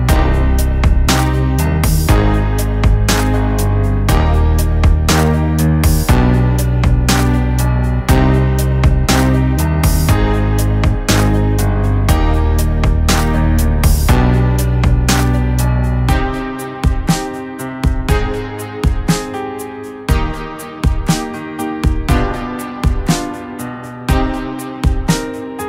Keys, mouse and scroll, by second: 2.0-5.9 drag, 16.7 click, 16.8-19.6 drag, 21.8 click, 21.8 click, 25.0 click.